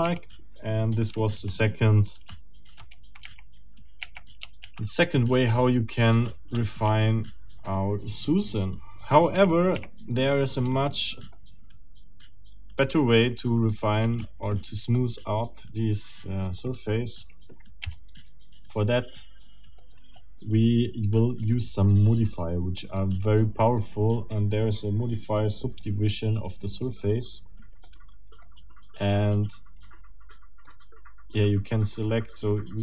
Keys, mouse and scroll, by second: 0.0 Tab, 1.3 ctrl+z, 3.2 ctrl+Tab, 4.6 ctrl+z, 6.8 ctrl+Tab, 11.3-13.6 middle drag, 14.0 Tab, 16.6 middle click, 17.8 a, 19.1 middle click, 21.4 click, 22.9 click, 26.8 click, 27.8 middle click, 29.0-30.6 scroll up 2, 30.6 click, 31.9 click, 32.5 middle click.